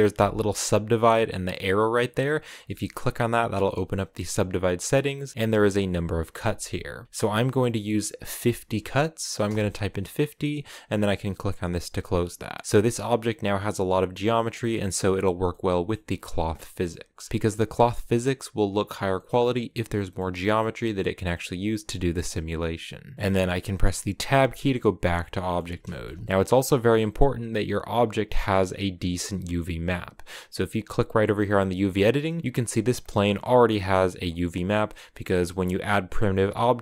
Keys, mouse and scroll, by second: 2.3-5.3 drag, 7.0-8.6 drag, 11.7 click, 12.3-14.0 middle drag, 14.0 scroll down 1, 14.2-16.9 middle drag, 16.9-17.9 scroll up 2, 17.9-18.3 scroll up 1, 18.3-18.9 scroll down 1, 18.9-23.9 middle drag, 23.9 Tab, 24.3 scroll down 2, 24.5 middle click, 25.4 a, 25.6 shift+middle click, 25.8-26.2 scroll up 1, 26.2 right click, 26.2-27.8 middle drag, 30.9 middle click, 31.4 click, 32.0-35.9 middle drag, 35.9 Tab, 36.2 right click, 36.5 Tab.